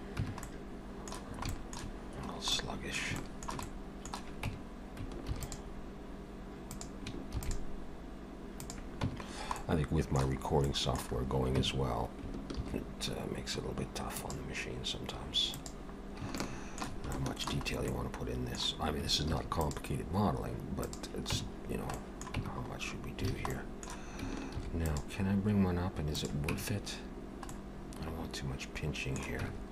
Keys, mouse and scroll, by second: 0.2 Tab, 0.4 middle click, 1.5 shift+middle click, 2.2-2.6 scroll up 2, 2.6 middle click, 3.2 shift+middle click, 3.7 middle click, 4.5 Tab, 5.3 ctrl+r, 7.2 ctrl+r, 9.1 Tab, 9.3-10.1 scroll down 2, 9.6 middle click, 10.4-11.6 scroll up 4, 10.7 middle click, 11.6 Tab, 12.6 ctrl+r, 16.1 scroll down 1, 16.4 shift+middle click, 17.6 shift+middle click, 17.7 scroll up 1, 17.9 middle click, 19.4 ctrl+r, 21.4 Tab, 21.6 scroll down 2, 22.0 middle click, 22.4 Tab, 22.7 scroll up 2, 23.3 alt+a, 23.5 middle click, 24.6 ctrl+r, 26.6 Tab, 27.1 scroll down 1, 27.5 middle click, 29.4 Tab.